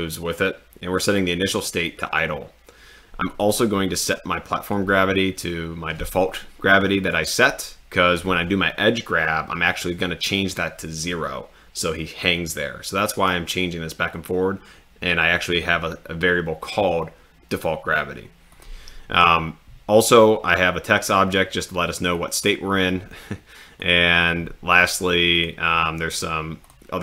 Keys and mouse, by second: 18.6 click, 26.6-27.0 drag.